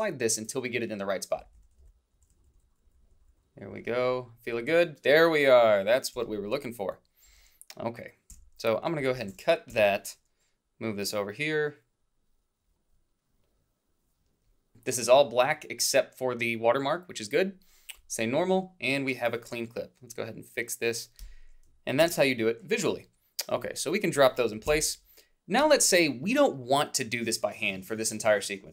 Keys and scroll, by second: 2.2 typing, 6.2 h, 7.3 a, 9.7 Delete, 22.0 shift+z, 24.7 alt+Down.